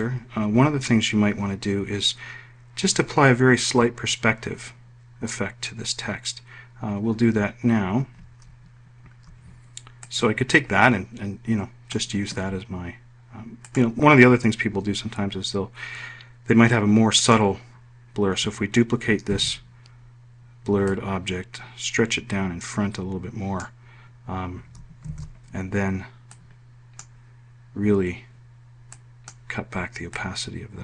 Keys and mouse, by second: 18.0 click, 20.1 ctrl+d, 21.7-24.5 drag, 25.8 ctrl+shift+f, 27.1 click.